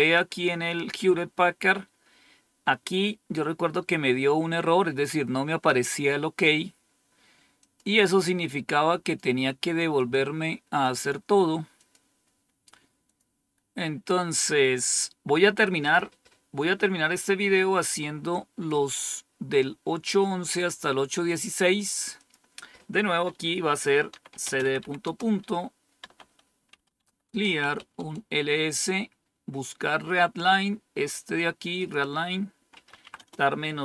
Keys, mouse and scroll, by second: 7.6 click, 9.0 click, 10.0 click, 10.8 click, 11.7 click, 13.0 click, 15.8 click, 20.4 click, 22.1 click, 24.0-28.4 typing, 31.7 click, 32.5-33.8 typing.